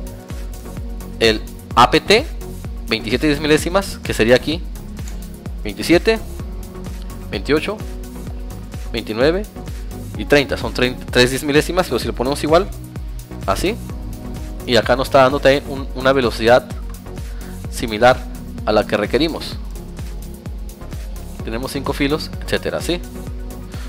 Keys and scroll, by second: 2.2 Tab, 3.0 Tab, 13.2 Tab, 15.8 Tab, 18.3 Tab, 19.0 alt+Tab, 21.1 Tab.